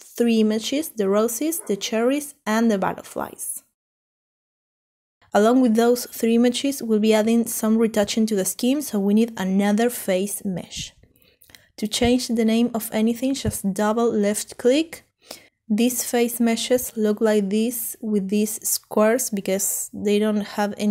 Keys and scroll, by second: 6.4-8.3 typing, 12.6-13.3 typing, 16.3-16.9 typing, 19.5-20.9 typing.